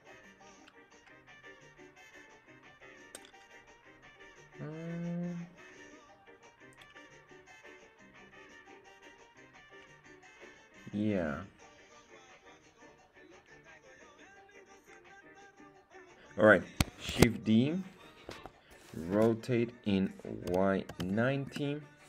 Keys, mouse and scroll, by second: 17.0 shift+d, 18.2 Escape, 19.1 r, 20.4 y, 20.8 KP_9, 20.9 KP_0, 21.4 Return.